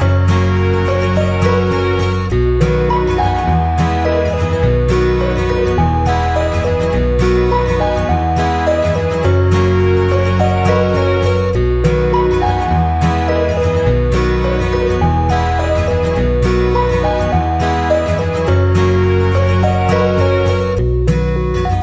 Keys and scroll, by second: 4.8 ctrl+-, 5.2 ctrl+0, 11.1 ctrl+c, 11.2 ctrl+v.